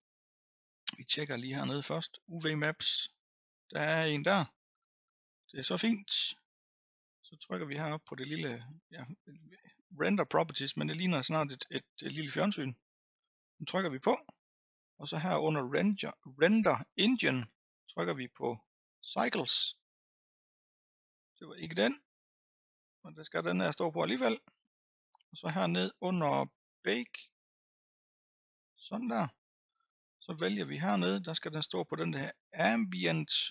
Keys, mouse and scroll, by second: 1.3 click, 3.0-13.3 drag, 17.6-28.6 drag, 28.6 scroll down 2, 29.3-30.4 scroll down 2, 30.4-33.5 drag.